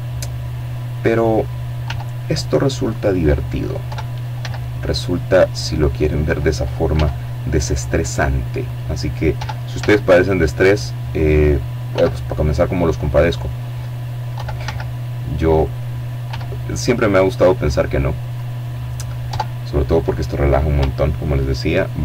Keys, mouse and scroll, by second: 0.8 click, 1.7 e, 4.1 click, 4.8 s, 6.5 click, 7.2 e, 7.6 z, 9.0 click, 9.8 s, 11.0 click, 12.2 e, 12.5 z, 13.4 click, 14.1 s, 16.2 click, 17.1 Tab, 20.2 ctrl+2, 21.9 scroll down 2.